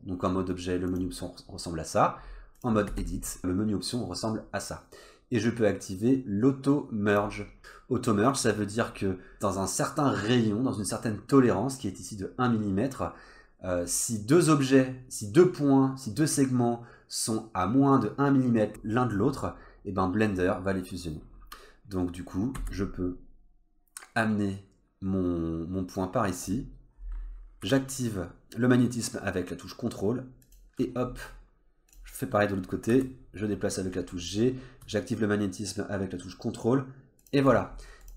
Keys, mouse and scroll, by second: 0.9 click, 2.6 click, 2.9 Tab, 3.3 click, 8.3 click, 22.6 g, 27.0-27.6 scroll up 3, 27.6 g, 30.9-31.9 scroll down 3, 31.9 click, 32.9 g, 37.6-38.0 scroll up 2, 38.0 click.